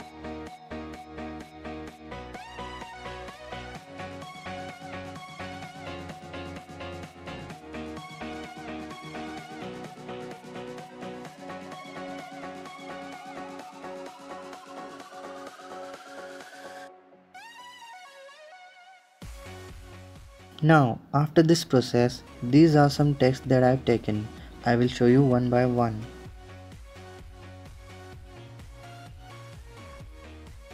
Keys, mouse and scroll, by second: 3.5 click, 4.4 click, 4.9-5.9 drag, 8.3 click, 8.6 click, 9.3 click, 10.0 click, 10.5 click, 10.7-11.0 drag, 11.2 scroll down 3, 11.5-12.5 drag, 13.2 KP_0, 13.7 middle drag, 14.0-14.8 scroll down 3, 14.2 click, 14.5-15.9 typing, 14.8 click, 15.0 click, 15.3 click, 15.6 click, 15.8 click, 16.0-16.7 middle drag, 16.7 click, 16.9 shift+middle click, 17.6-18.4 drag, 18.3 ctrl+KP_0, 18.7 space, 20.7 click, 22.1 ctrl+KP_0, 24.3 click, 25.1 ctrl+KP_0, 28.1 click, 28.7 ctrl+KP_0.